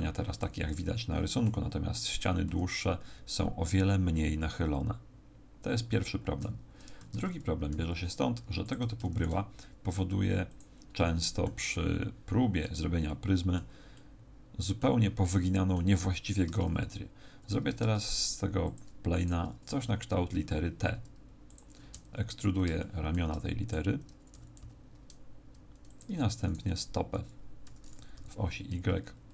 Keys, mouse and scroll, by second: 2.4 KP_3, 7.0 Tab, 7.7 z, 8.4 x, 9.1 shift+a, 11.0 middle click, 11.7 middle click, 13.0 middle click, 13.9 middle click, 15.2 middle click, 16.4 Tab, 17.8 ctrl+Tab, 19.2 right click, 19.7 e, 21.5 ctrl+click, 22.4-23.0 scroll down 4, 22.8 shift+middle click, 24.0 right click, 24.3 e, 26.0 ctrl+click, 26.4 right click, 27.6 e.